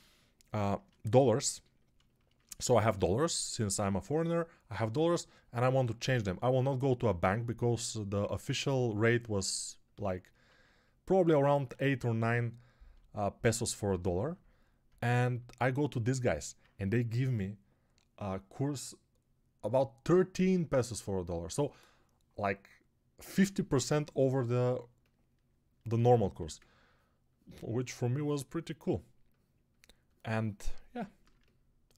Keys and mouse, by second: 0.6 middle click, 1.0 middle click, 2.5-5.7 middle drag, 2.7 2, 26.1 1.